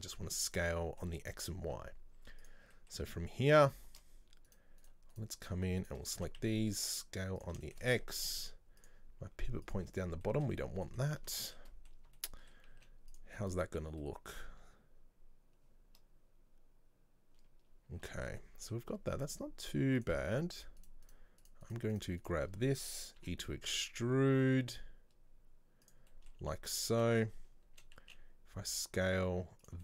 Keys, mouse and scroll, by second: 2.5 click, 2.8 middle click, 3.6 right click, 4.5 right click, 4.9 right click, 5.2 right click, 5.9 shift+right click, 6.2 s, 7.7-8.9 shift+middle drag, 8.9-10.3 drag, 10.3 shift+middle click, 10.7 scroll up 1, 10.9-12.8 middle drag, 12.8 z, 13.4-17.1 middle drag, 18.2-20.0 shift+middle drag, 20.0 click, 20.6 right click, 20.9 shift+right click, 21.1 shift+right click, 21.5 shift+right click, 21.7 shift+right click, 22.0 shift+right click, 22.3 shift+right click, 23.2 e, 26.2-28.1 middle drag, 28.1 s.